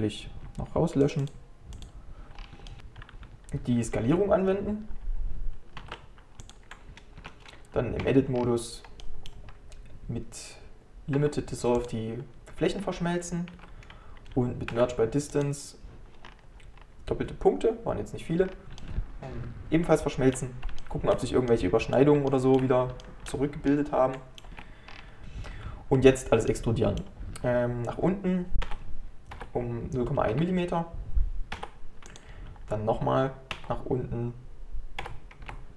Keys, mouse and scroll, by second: 1.9 click, 2.4-2.7 scroll down 3, 2.7 shift+middle click, 2.8 Tab, 5.8 ctrl+a, 7.2 Tab, 8.4 scroll down 5, 9.1 middle click, 9.5 scroll up 1, 11.2 x, 12.8-13.6 scroll up 2, 13.6 1, 16.3 scroll up 2, 16.8-17.9 scroll down 1, 18.8-24.5 shift+middle drag, 24.5 Tab, 24.9-26.0 scroll down 6, 25.2 click, 26.0-26.5 scroll up 1, 26.5-28.7 middle drag, 28.7 e.